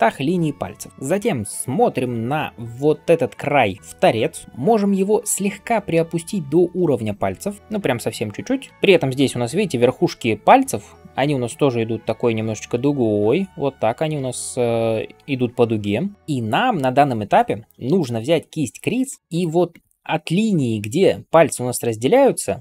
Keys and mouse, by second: 0.9-3.3 middle drag, 3.3-15.4 drag, 11.1 d, 14.1-15.9 d, 15.4 right click, 19.2 click, 19.2 middle click, 19.2 right click, 19.2 [.